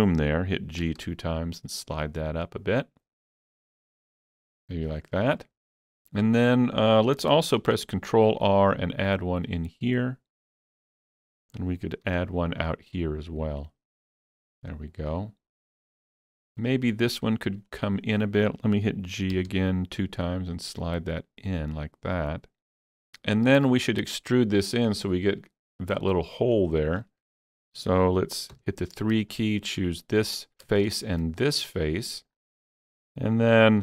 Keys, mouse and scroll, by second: 0.8 shift+click, 1.0 g, 4.9 shift+click, 4.9 g, 7.1 ctrl+g, 7.1 shift+click, 7.6 ctrl+r, 8.5 click, 8.6 click, 10.8 click, 12.1 ctrl+r, 12.5 click, 14.3 click, 14.7-19.4 middle drag, 17.1 alt+click, 19.4 g, 19.6 g, 23.1 middle click, 26.5 shift+middle click, 27.0 scroll up 2, 28.6 3, 29.2 click, 31.4-33.8 middle drag.